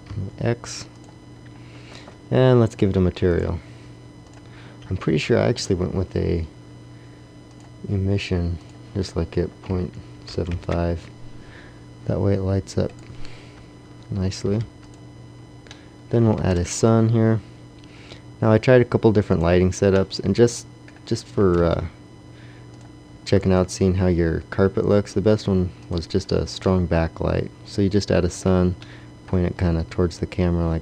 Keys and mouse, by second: 1.4 click, 1.6 click, 2.6 middle click, 7.3-8.6 middle drag, 14.4 x, 16.3 shift+a, 21.3 g, 23.3 r, 29.5 r, 30.0 click, 30.7-30.8 drag.